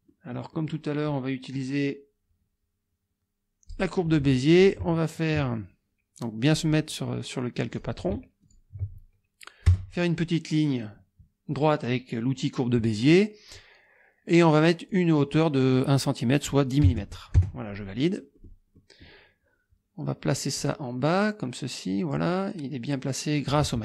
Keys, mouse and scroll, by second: 0.1 click, 3.7 click, 4.5 click, 6.4 click, 7.7 click, 8.4 ctrl+click, 9.7 Return, 11.5 click, 14.9-15.4 drag, 16.8 KP_0, 17.4 KP_Enter, 18.4 click, 18.8 click, 20.6-22.4 drag.